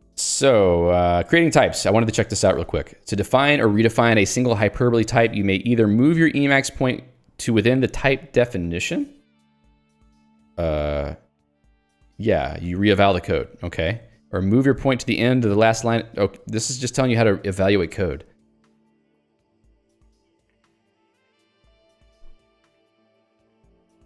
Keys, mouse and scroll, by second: 2.1 click, 2.5 j, 13.8 click, 14.2 j.